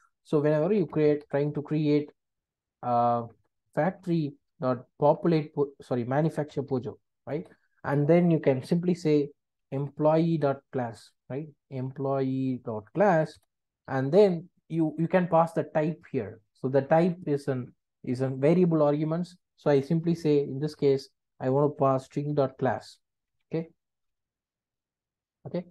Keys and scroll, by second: 4.2 Return, 7.4 Return, 13.4 Return.